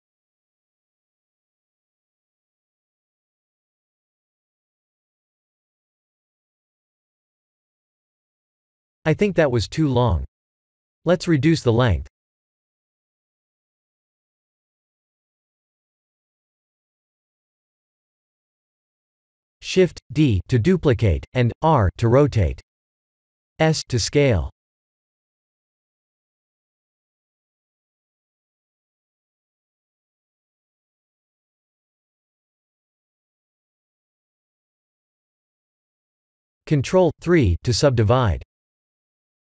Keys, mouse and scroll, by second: 2.7 ctrl+click, 3.3 Tab, 3.7-7.1 middle drag, 7.4 KP_1, 10.1 ctrl+z, 10.7 ctrl+z, 11.5 g, 12.6 x, 14.6 ctrl+click, 15.1 Tab, 15.5-18.4 middle drag, 18.7 KP_1, 20.6 shift+d, 21.1 r, 23.9 ctrl+click, 26.2 s, 28.0 click, 31.3 g, 32.2 x, 33.3 click, 33.8-34.3 middle drag, 34.8 shift+z, 35.3-35.7 middle drag, 36.2-37.2 middle drag, 37.4 click, 38.0 ctrl+3, 38.3 click, 38.5 ctrl+3, 38.8-39.4 middle drag.